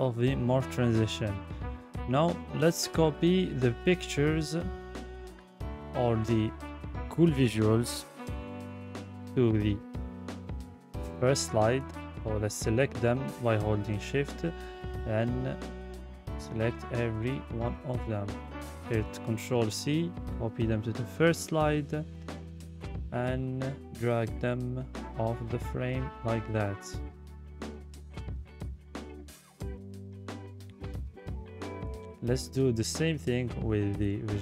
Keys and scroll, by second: 15.8 ctrl+c, 18.1 ctrl+v.